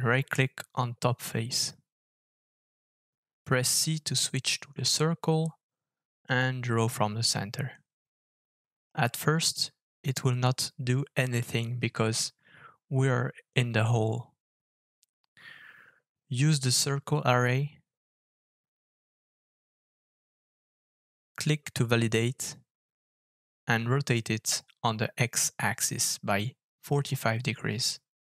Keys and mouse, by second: 0.6 KP_7, 10.0-28.2 middle drag, 24.6 r.